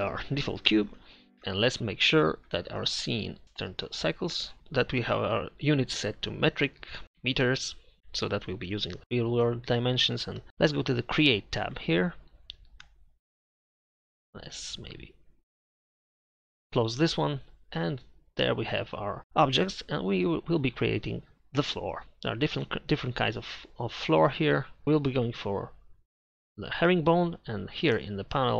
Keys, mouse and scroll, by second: 1.3 d, 16.7-18.6 drag, 21.6 click, 25.0-28.5 drag.